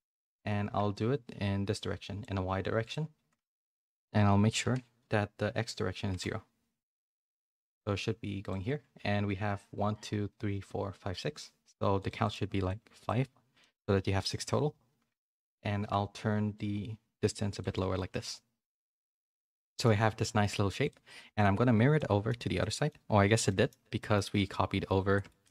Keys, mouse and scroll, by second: 1.0-2.2 shift+drag, 2.9-6.5 drag, 7.5-8.5 shift+drag, 12.2 click, 13.0 click, 13.6 middle click, 16.5-17.6 shift+drag, 17.9 a, 18.1 middle click, 19.2 middle click, 20.2 middle click, 20.8 click, 21.9 middle click, 22.5 middle click, 23.4 middle click, 24.0 middle click, 25.1 shift+middle click, 25.4 shift+middle click.